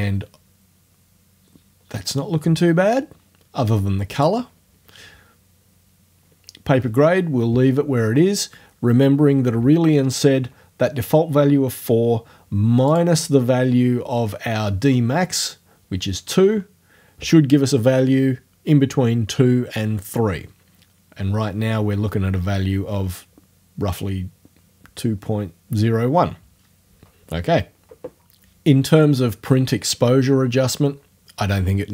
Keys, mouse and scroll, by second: 4.1 click, 4.4-5.4 scroll up 2, 5.4-12.9 scroll up 1, 12.9 click.